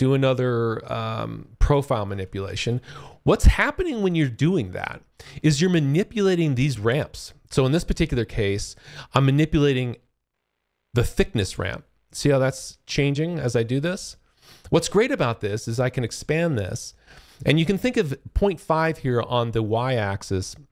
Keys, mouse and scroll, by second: 2.3 alt+click, 3.9 click, 9.2 ctrl+shift+click, 15.6 click.